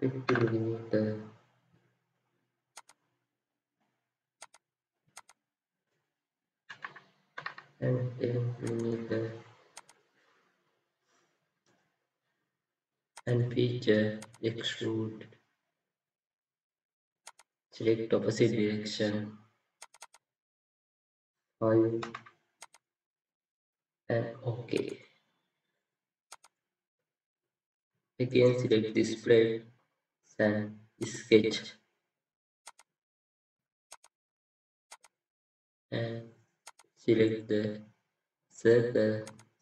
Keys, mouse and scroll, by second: 0.2 Return, 6.7 typing, 9.9-10.7 typing, 10.1-10.7 scroll up 1, 19.9 double click, 23.1 typing, 28.2 right click.